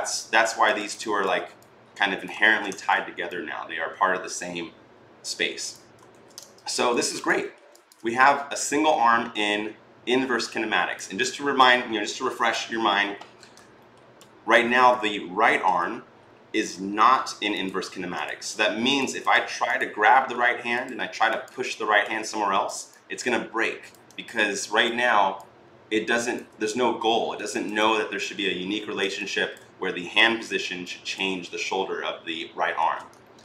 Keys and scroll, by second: 2.3 ctrl+z, 5.9 ctrl+z, 32.6 ctrl+z.